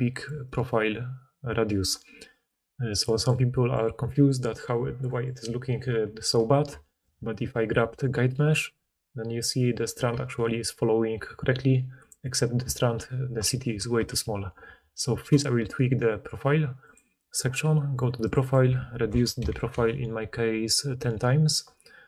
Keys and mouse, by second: 0.2 d, 0.4 middle click, 0.4 right click, 0.4 d, 2.4 d, 7.0-12.3 drag, 8.1 g, 12.3-15.2 middle drag, 14.2 ctrl+z, 15.2 click, 15.3-16.8 middle drag, 16.8-22.0 drag.